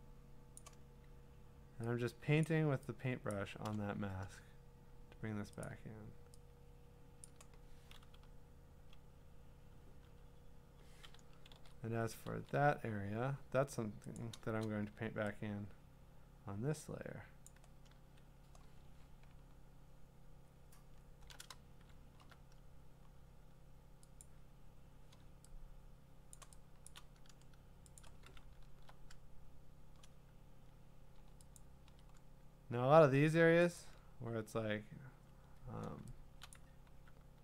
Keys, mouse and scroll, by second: 0.6 click, 2.4 click, 3.3 click, 5.6 click, 7.2 click, 8.2-8.9 ], 11.6 ctrl+z, 12.3 ctrl+z, 13.3-14.2 scroll, 14.2 click, 17.5 click, 18.8-19.3 alt+scroll, 19.3 scroll down 10, 19.8 scroll down 5, 20.5-21.8 scroll up 11, 22.0-22.3 scroll up 3, 23.0-23.5 scroll down 2, 24.3-26.3 click, 24.5 scroll, 25.9 middle click, 26.5 click, 26.5 click, 26.8 click, 26.9 click, 27.1 click, 28.0 click, 28.4 scroll, 31.6 ctrl+click, 32.8 scroll, 33.8 ctrl+click, 34.3-35.0 scroll, 36.5 click, 36.9-37.4 typing.